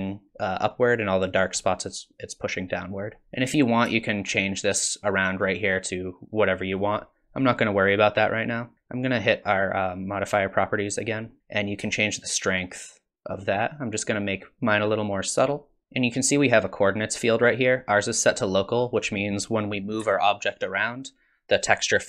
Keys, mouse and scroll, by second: 3.2 middle click, 4.0 shift+click, 11.0 click, 11.9 shift+click, 18.7 click, 20.0 g.